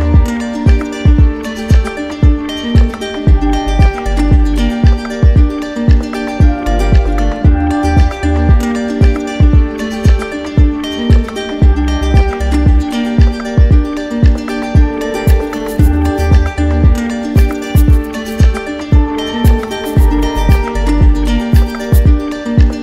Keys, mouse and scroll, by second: 0.7-1.9 right drag, 1.9-3.4 drag, 3.6 right click, 4.9 right click, 7.3 right click, 7.7 right click, 8.5 z, 9.8 click, 11.1 right click, 12.2 click, 16.5 alt+click, 16.8 ctrl+z, 18.6-21.9 drag, 21.0 ctrl+z.